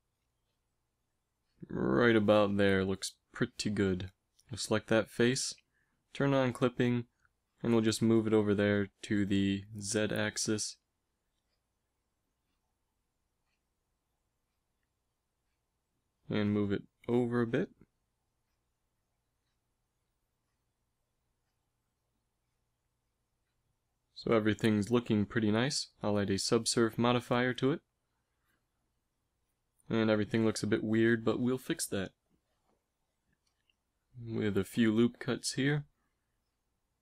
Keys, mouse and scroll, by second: 1.7 g, 4.1-6.8 right drag, 8.3 g, 10.0 z, 15.1 ctrl+KP_Add, 16.2 g, 24.4 Tab, 26.1 ctrl+2, 29.9 Tab, 34.5 ctrl+r.